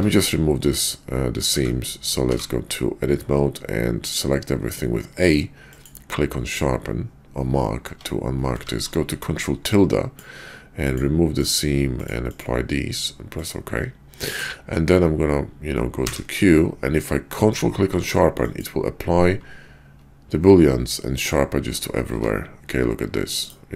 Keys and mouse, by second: 1.5 a, 2.1 q, 7.8 Tab, 8.5 ctrl+`, 16.0 q, 22.1 Tab.